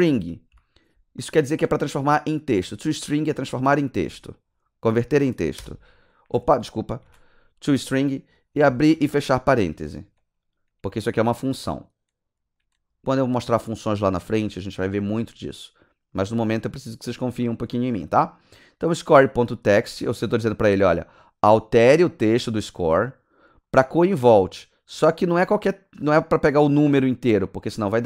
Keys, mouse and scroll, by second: 0.0-1.0 typing, 5.6 Return, 7.1 ctrl+z, 8.7 shift+9, 9.0 shift+0, 11.5 click, 16.1 click, 17.6 ctrl+g, 17.7 s, 24.1 s, 24.3 click.